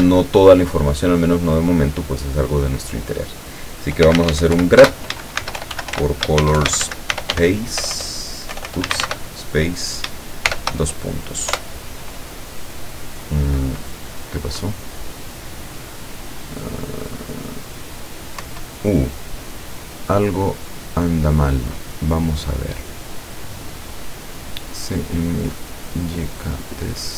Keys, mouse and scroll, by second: 0.0 shift+space, 3.8-10.5 typing, 11.5 Return, 18.4 Up.